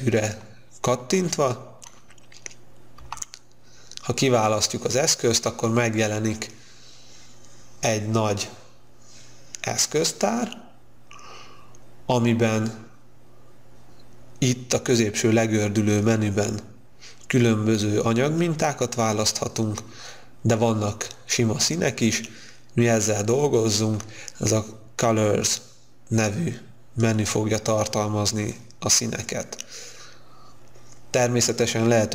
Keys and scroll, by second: 3.0 b.